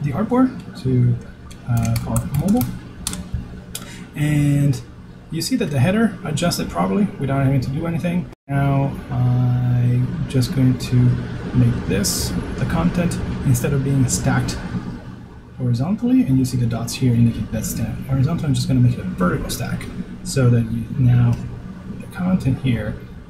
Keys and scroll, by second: 1.7 super+r, 4.2 shift+o.